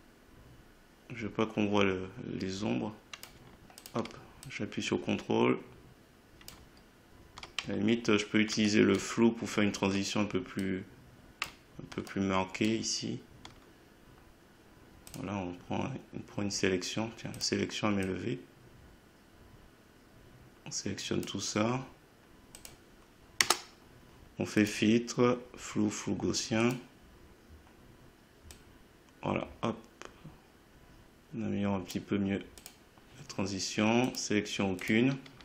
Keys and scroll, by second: 23.4 Return.